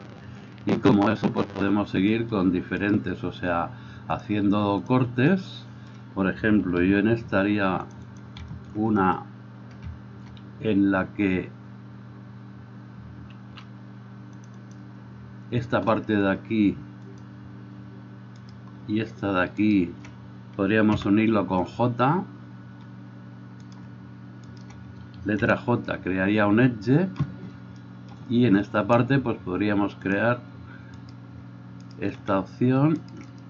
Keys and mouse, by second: 0.0-4.3 middle drag, 3.0-4.3 right drag, 4.3-8.4 drag, 7.0 ctrl+r, 8.4-17.3 shift+middle drag, 13.6 ctrl+r, 17.3-33.4 drag, 21.1 j, 23.9 middle click, 23.9 right click, 24.7 shift+middle click, 24.7 shift+right click, 25.6 j, 31.2 right click, 32.0 shift+right click.